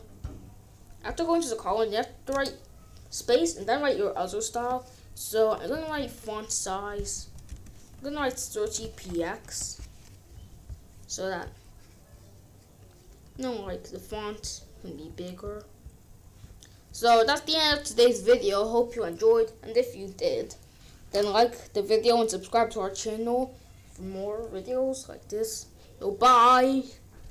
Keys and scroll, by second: 2.2 space, 5.2-6.4 typing, 7.1 Down, 7.4 Return, 7.6-9.2 typing, 9.4 ctrl+s.